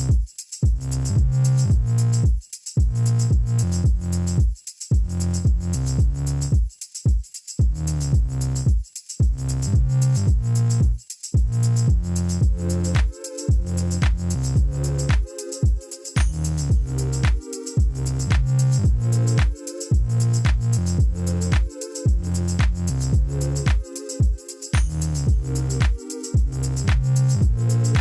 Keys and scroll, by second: 1.6 e, 3.8 3, 4.4 Return, 5.3 ctrl++, 6.1 p, 9.4-10.1 typing, 10.7 Return, 19.8 e, 21.2 ., 21.6 2, 22.7 Return, 27.1 p.